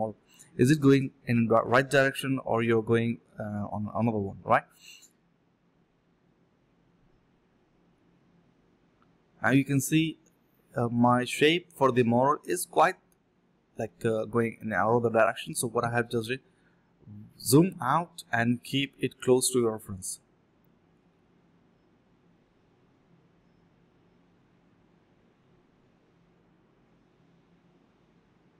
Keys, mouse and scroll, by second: 0.0 shift+click, 1.1 ctrl+b, 1.8 double click, 3.7 ctrl+z, 3.9 alt+click, 4.1 alt+click, 4.2 alt+double click, 4.5 alt+double click, 5.4 alt+click, 5.5 alt+click, 5.7 alt+click, 6.4 alt+click, 6.6 alt+click, 6.9 ctrl+b, 7.2-8.9 typing, 8.3 alt+click, 8.5 alt+click, 8.6 alt+s, 8.6 click, 9.3 alt+click, 9.8 ctrl+z, 10.3-10.7 typing, 12.5-14.9 typing, 13.3 alt+click, 16.6 typing, 19.5 alt+click, 19.7 alt+click, 20.9 alt+click, 21.1 alt+click, 21.4 alt+click, 22.4 alt+click, 23.3 alt+click, 23.5 alt+click, 23.8 alt+click, 24.0 ctrl+b, 24.3 double click, 24.5-25.3 typing, 26.2 double click, 27.9 double click, 27.9 shift+click, 28.0 shift+double click, 28.3 alt+double click.